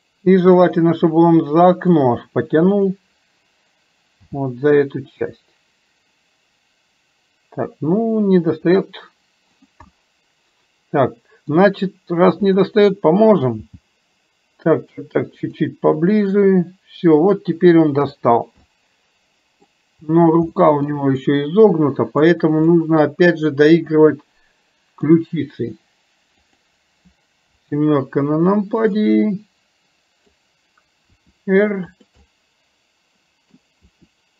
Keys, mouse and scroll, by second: 1.1 middle click, 2.8 click, 9.9-11.7 middle drag, 12.5 click, 16.1-18.3 middle drag, 18.3 scroll down 1, 18.8 scroll up 1, 18.9-19.8 middle drag, 19.8 scroll down 1, 20.6 middle click, 21.9 scroll up 1, 22.0-22.4 middle drag, 22.4 scroll down 1, 22.8 scroll up 1, 22.9 middle click, 23.0 scroll down 1, 24.0 scroll up 1, 24.1-25.2 middle drag, 26.4 click, 29.1-30.4 middle drag, 32.3-33.7 middle drag.